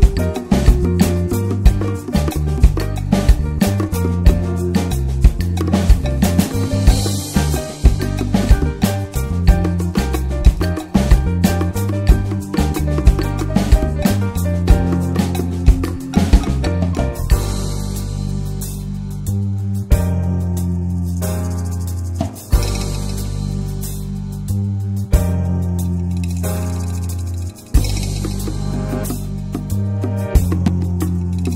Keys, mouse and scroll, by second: 3.7 middle click, 3.9-4.5 scroll up 3, 4.0 shift+middle click, 4.5-5.9 scroll down 2, 4.6 shift+middle click, 5.9 i, 7.6 m, 8.3 2, 8.7 click, 9.1 alt+shift+click, 9.4 alt+middle click, 9.5 alt+z, 9.7 shift+middle click, 9.9-10.4 scroll up 3, 10.4 click, 11.3 ctrl+z, 11.4 click, 12.0 click, 13.0 s, 14.1 click, 14.8 scroll down 4, 15.0 Tab, 15.3 Tab, 15.5 middle click, 16.1 1, 16.3 click, 16.7 alt+middle click, 17.0 alt+z, 17.3 middle click, 17.7 click, 18.0 alt+middle click, 18.3 alt+z, 18.6 scroll up 4, 18.9 ctrl+s, 19.2-20.2 drag, 20.2 scroll down 4, 20.4 Tab, 20.6 alt+z, 20.8 click, 20.9 scroll down 5, 21.1 click, 21.2 right click, 21.6 scroll down 1, 21.8-22.1 shift+middle drag, 22.1 ctrl+s, 22.2-22.5 drag, 22.5-23.5 middle drag, 23.5 ctrl+s, 23.7 scroll up 2, 23.9 shift+middle click, 24.2 Tab, 24.5 Tab, 24.8 ctrl+s, 25.0-25.4 middle drag, 25.4 shift+a, 26.0 click, 26.2 Tab, 26.4 click, 26.6-27.0 scroll up 1, 27.0 3, 27.1 click, 27.6 shift+d, 28.1 ctrl+s, 28.4 middle click, 28.8-29.3 scroll down 1, 29.3 s, 30.4 middle click, 31.2 p.